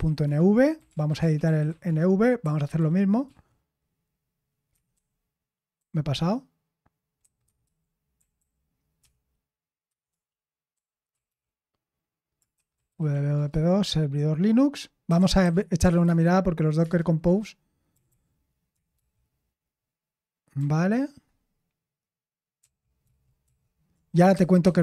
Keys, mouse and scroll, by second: 0.0-3.2 typing, 4.4-5.7 typing, 7.2-16.8 typing, 17.8-18.9 typing, 20.6 typing, 22.3-24.8 typing.